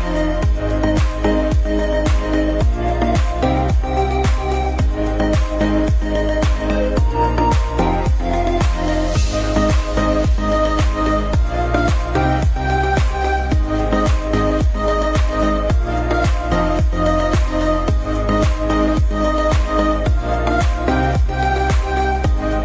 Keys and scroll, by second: 3.2 F4, 4.0 Escape, 6.1 c, 6.6 Escape, 8.0 F2, 20.8 space.